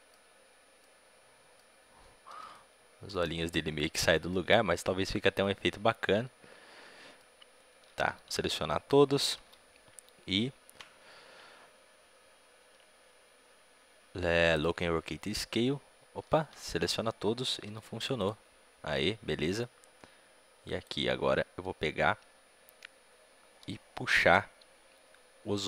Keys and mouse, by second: 0.7-7.8 middle drag, 7.8 a, 7.9 a, 8.1 a, 16.1 a, 16.3 a, 16.6 a, 18.2 i, 19.5-25.6 drag.